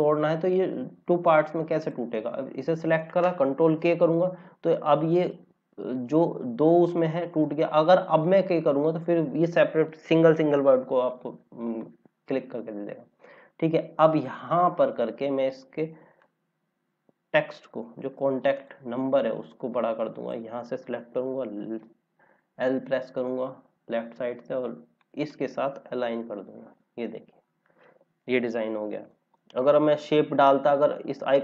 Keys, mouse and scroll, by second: 1.7 click, 3.7 ctrl+k, 5.1 click, 11.1 click, 14.5 scroll down 1, 16.2 click, 21.7 l, 22.1 scroll down 1, 24.9 click, 25.9 l, 27.0 scroll down 1, 28.5 click, 30.2 Up, 30.4 Up.